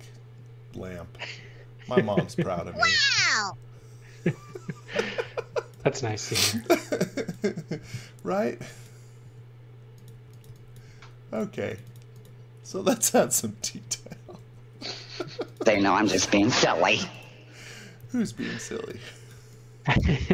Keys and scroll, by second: 5.2 x, 5.8 v, 8.1-10.9 typing, 14.3 super+c, 16.3 super+v, 17.7-19.3 typing.